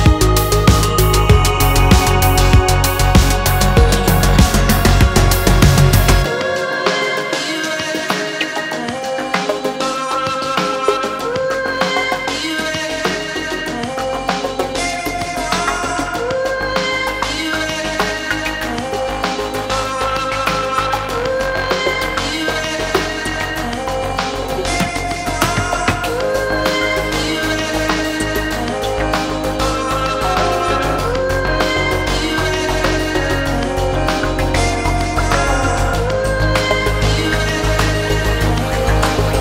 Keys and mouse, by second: 0.1 shift+click, 0.9 3, 1.4 shift+click, 1.9 2, 2.1 click, 2.6 ctrl+r, 4.1 3, 4.9 click, 5.4 3, 5.7 click, 7.2 shift+click, 7.9 alt+e, 11.3 shift+middle click, 11.5 middle click, 12.3 middle click, 12.8 middle click, 13.4 3, 13.8-14.8 drag, 14.9 shift+middle click, 15.5 ctrl+middle click, 16.3 shift+middle click, 17.1 e, 18.2 s, 19.9 e, 22.9 s, 23.3 middle click, 24.0-25.2 ctrl+drag, 25.3 Tab, 25.8 1, 26.2 Tab, 26.5 1, 27.7 shift+click, 28.4 j, 29.2 click, 30.2 click, 30.6 shift+click, 30.9 Tab, 31.6 shift+click, 32.2-33.9 drag, 34.0 shift+click, 34.4 drag, 34.9 drag, 35.4-35.8 ctrl+drag, 36.1 shift+drag, 36.5-38.2 drag, 38.4 shift+click, 38.7-39.3 drag.